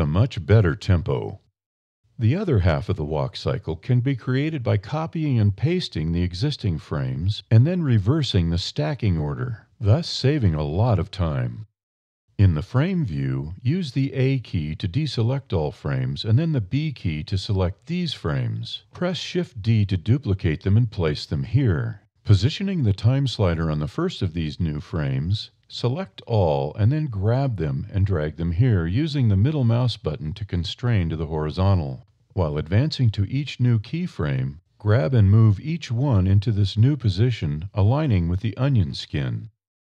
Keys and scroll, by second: 14.6 a, 15.2 b, 18.8 shift+d, 25.9 a, 27.0 g, 30.4 alt+a, 30.9 g, 33.1 g, 37.9 alt+a, 38.8 g.